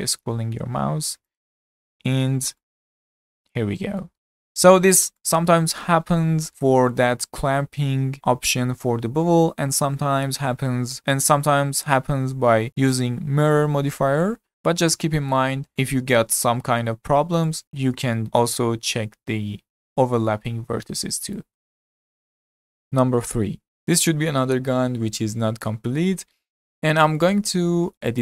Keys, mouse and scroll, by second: 1.8 Tab, 2.2-2.6 scroll down 3, 2.6-4.1 middle drag, 4.1 z, 4.4-7.8 middle drag, 11.2-12.7 middle drag, 12.7-14.5 drag, 14.5-20.3 shift+middle drag, 23.8-27.5 middle drag, 28.1 click.